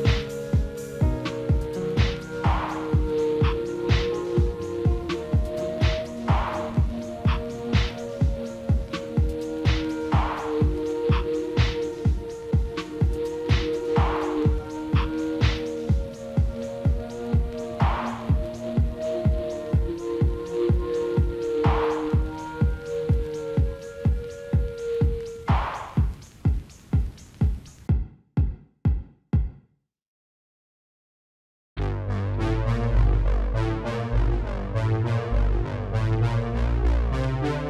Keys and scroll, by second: 35.0 ctrl+BackSpace.